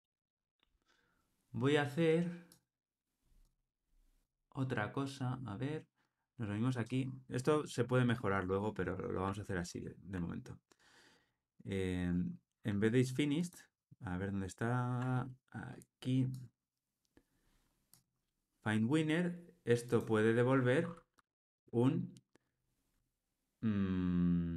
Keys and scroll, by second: 9.7 super+BackSpace, 13.4 super+b.